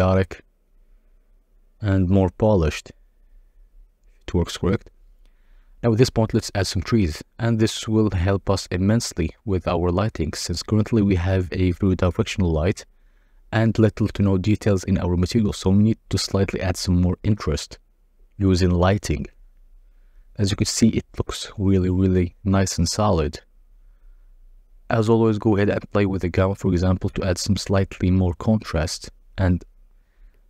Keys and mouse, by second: 0.0 Tab, 0.1 a, 0.3 s, 0.9 Tab, 1.4 Tab, 1.6 a, 1.7 g, 1.8 z, 2.5 Tab, 4.3 click, 4.9 click, 6.3-7.6 drag, 8.3 click, 10.6 s, 11.5 g, 12.0 shift+z, 15.4 g, 16.3 z, 16.9 KP_0, 25.1 click, 26.3-30.4 shift+middle drag.